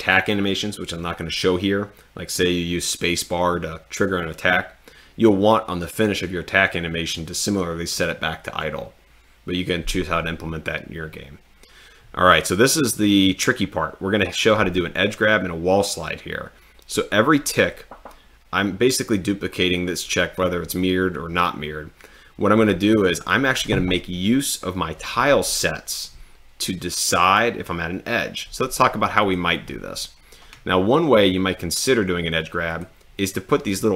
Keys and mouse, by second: 29.3 click, 32.7 click.